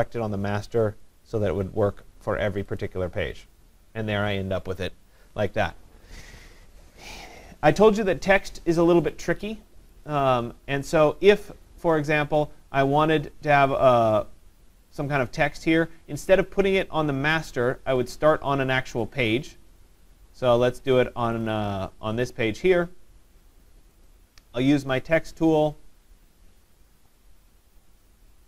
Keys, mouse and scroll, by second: 1.0 click, 9.9 click, 10.2 click, 21.4 click, 21.7 click, 24.1 click.